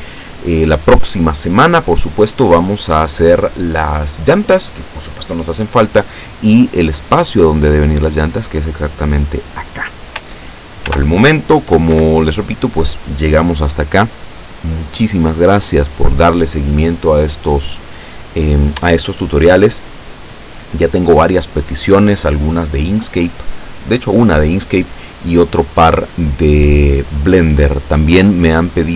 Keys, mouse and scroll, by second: 1.1-1.5 scroll down 2, 10.9 ctrl+s, 12.0 Escape.